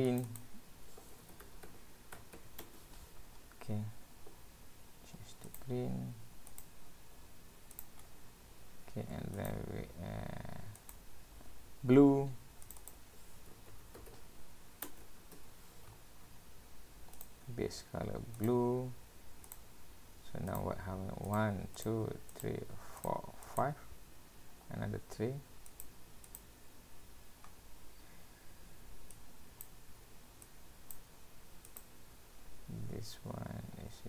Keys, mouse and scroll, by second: 0.3 click, 3.4-3.9 scroll down 3, 4.4-5.0 scroll down 4, 5.5 click, 8.0-9.2 scroll up 7, 9.2 scroll up 3, 9.4 click, 10.8 click, 12.7 click, 12.8 click, 16.0 scroll up 1, 16.2-16.8 scroll down 4, 17.2 click, 19.5 click, 19.8-20.3 scroll up 2, 20.3 scroll up 3, 20.5 click, 21.4 click, 22.3 click, 23.0 click, 23.7 click, 24.1 scroll down 1, 25.7 click, 26.3 click, 27.5-27.9 scroll up 2, 29.2 click, 30.5 click, 31.8 click.